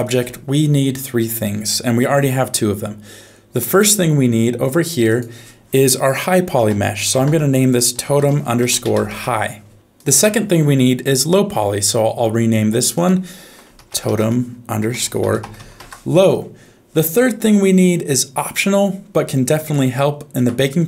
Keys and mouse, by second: 3.6 click, 5.2-9.1 drag, 13.0-15.8 drag, 19.7 shift+middle click.